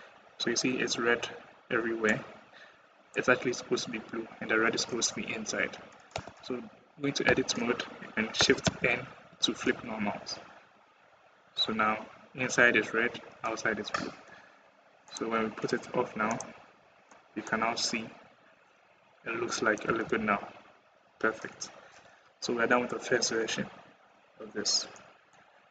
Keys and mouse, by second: 1.9 middle click, 2.7 middle click, 6.0 Tab, 7.1 a, 8.8 shift+n, 9.5 Tab, 10.9 middle click, 11.4 middle click, 13.0-13.5 middle drag, 16.5-17.4 middle drag, 17.4 click, 17.5 middle click, 17.7 middle click, 19.6 middle drag, 19.7 /, 24.8 click, 25.4 middle click.